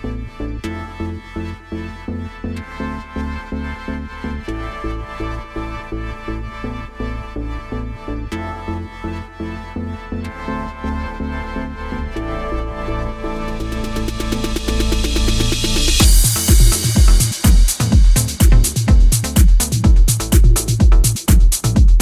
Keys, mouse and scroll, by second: 1.4 click, 2.0 click, 2.7 click, 3.5 click, 4.0 click, 4.4 click, 5.9 scroll up 2, 6.8 click, 8.0 click, 8.7 click, 10.2 click, 11.3 click, 12.3 click, 13.4 click, 14.4 click, 15.2 scroll down 3, 15.5 middle click, 16.8 scroll up 2, 17.3 click, 17.5-18.3 scroll up 3, 17.9 middle click, 18.5 click, 19.2 click, 19.7 click, 20.3 click, 20.6 click, 21.1 shift+f.